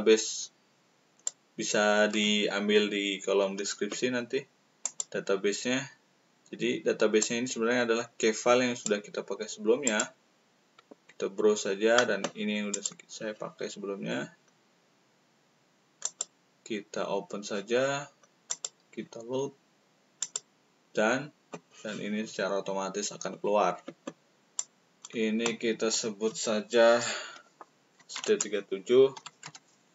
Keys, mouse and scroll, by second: 4.8 click, 7.1-8.8 drag, 9.8 click, 16.0 click, 20.1 click, 24.6-25.9 drag, 27.7-29.1 typing.